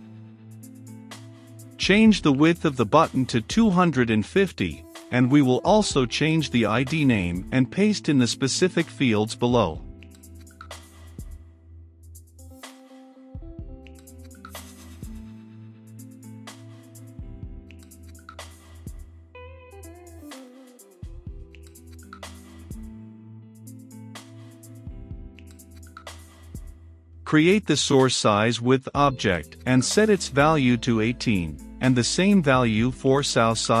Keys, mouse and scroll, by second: 1.8-4.3 drag, 5.9-7.2 drag, 7.5-9.1 typing, 10.5 click, 11.5 ctrl+c, 12.1 click, 12.9 ctrl+v, 14.0 click, 14.9 ctrl+v, 15.7 click, 16.4 ctrl+v, 17.1-19.4 middle drag, 19.4 click, 20.2-23.4 middle drag, 23.4 click, 23.8 middle click, 24.2-26.5 drag, 26.5 Return, 26.9 s, 26.9 o, 27.0 u, 28.5 r, 28.6 c, 28.7 e, 28.9 i, 29.1 Return, 29.9 Return, 30.3 e, 30.5 >, 30.9 w, 31.1 Return, 32.5-33.8 typing, 33.4 ctrl+space.